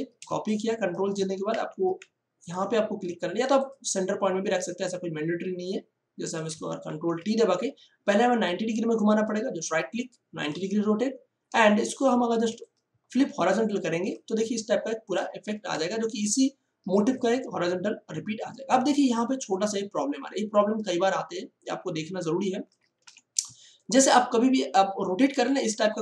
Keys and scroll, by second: 0.2 space, 1.4 ctrl+t, 6.8 ctrl+t, 11.5 space, 15.4 Return, 16.8 space, 23.0 v.